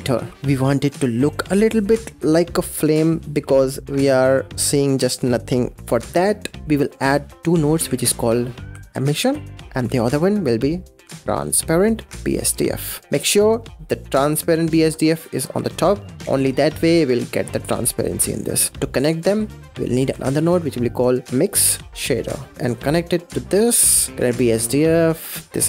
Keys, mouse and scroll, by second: 0.1 scroll down 3, 5.8 middle click, 5.8 scroll down 4, 6.2-6.7 middle drag, 6.7 shift+a, 8.1 s, 9.5 click, 9.6 shift+a, 13.3 click, 15.2 click, 15.7 click, 16.0 middle click, 16.6 click, 18.3 click, 18.7-19.2 middle drag, 19.2 click, 19.6 click, 19.9 shift+a, 21.3 BackSpace, 22.6 click, 24.1 click, 25.4 click.